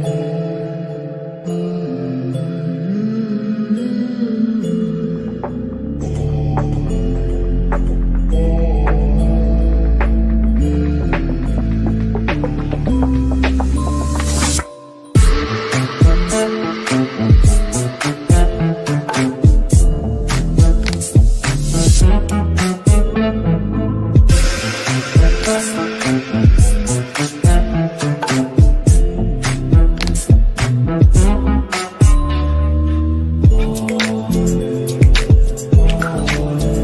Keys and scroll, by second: 0.2 shift+Page_Up, 17.9 Left, 24.3 KP_Add, 27.4 ctrl+z.